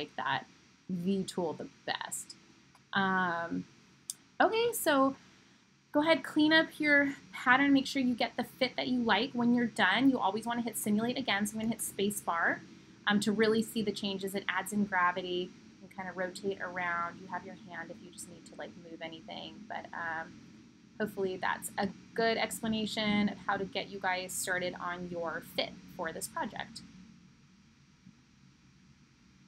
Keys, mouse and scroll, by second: 16.6 middle click, 16.8 middle click, 19.8-28.2 middle drag.